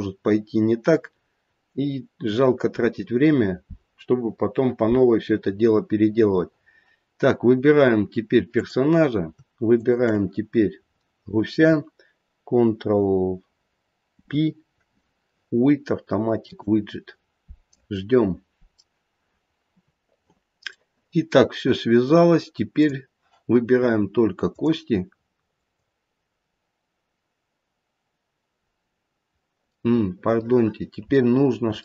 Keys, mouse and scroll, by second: 1.1 scroll down 2, 1.4-2.0 scroll up 2, 2.0-4.2 scroll up 1, 8.4 click, 9.7 shift+click, 14.0 ctrl+p, 20.8 middle click, 20.9 middle click, 22.8 click, 24.4 click, 25.5 click, 29.7 middle click, 31.3-31.8 scroll up 2.